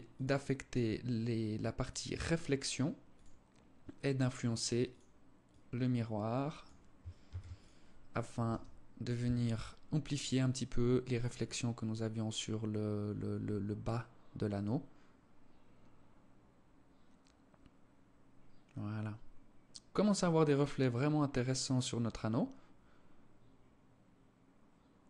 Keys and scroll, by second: 6.6 ctrl+s.